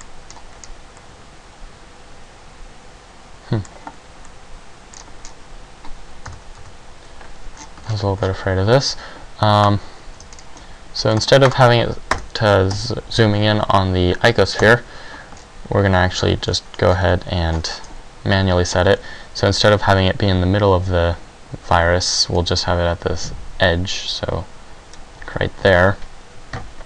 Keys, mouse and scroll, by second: 1.2 middle click, 1.2-2.4 scroll down 2, 4.4 middle click, 5.2-5.8 scroll down 5, 6.4 KP_Decimal, 6.5 KP_3, 8.1-8.7 ctrl+scroll up 11, 10.0 click, 10.4 shift+scroll down 1, 12.9 click, 14.8 KP_5, 15.5-16.3 ctrl+scroll down 1, 16.3 shift+scroll up 1, 16.7 shift+scroll down 1, 17.2 scroll up 4, 17.8 shift+scroll up 5, 22.7 click.